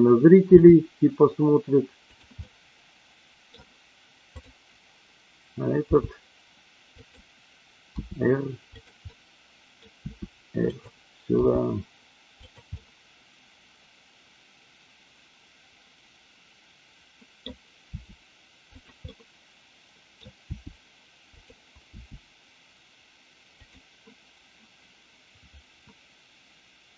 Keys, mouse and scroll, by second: 0.6 g, 2.0 click, 2.4-3.6 middle drag, 5.8 g, 7.0 click, 7.9 r, 9.1 middle click, 9.9 r, 10.7 click, 11.3 g, 12.4 click, 12.7-17.5 middle drag, 17.9 r, 19.0-20.2 middle drag, 20.6 r, 21.3 click, 21.9 g, 23.7 click.